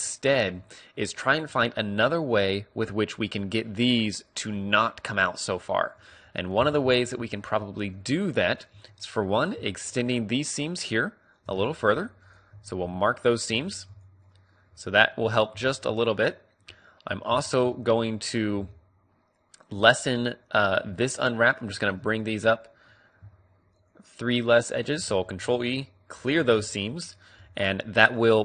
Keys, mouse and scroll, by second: 1.4-5.3 drag, 5.6-8.5 middle drag, 8.8 a, 9.3 click, 9.7-13.4 right drag, 11.8 ctrl+e, 12.6 a, 13.0 a, 13.6 u, 15.5-19.6 middle drag, 17.1 a, 20.9-24.2 middle drag, 24.2-26.7 right drag, 25.3 ctrl+e, 26.6 a, 26.7 a, 27.5 u.